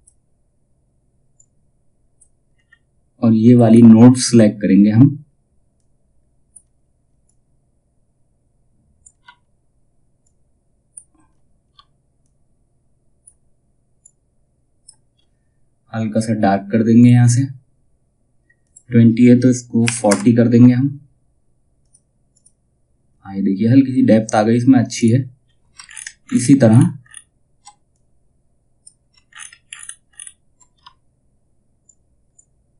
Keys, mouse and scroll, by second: 2.0 scroll down 1, 5.0 scroll up 1, 5.2-16.5 drag, 21.3 click, 24.5 click, 24.9-25.3 scroll down 1, 26.2-26.6 scroll up 1, 27.4-28.8 drag, 28.8-29.6 alt+scroll up 1, 31.3-32.7 shift+drag.